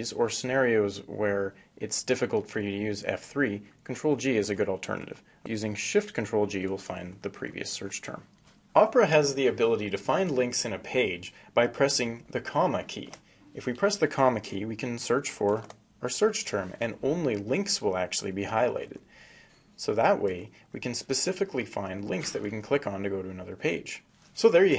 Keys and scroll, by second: 4.7 ctrl+shift+g, 11.7 ,.